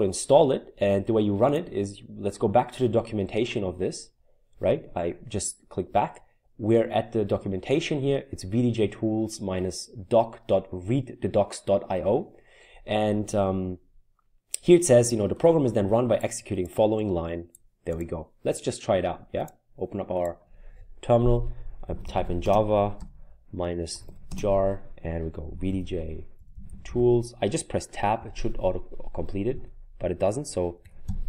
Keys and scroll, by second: 21.7-27.4 typing, 28.2 Tab, 30.8 typing, 31.0 Tab.